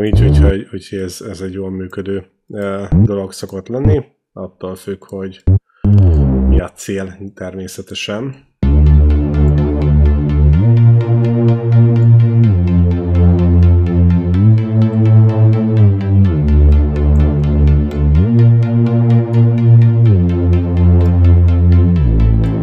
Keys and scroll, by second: 8.4 space, 18.7 ctrl+Down, 21.8 ctrl+Down.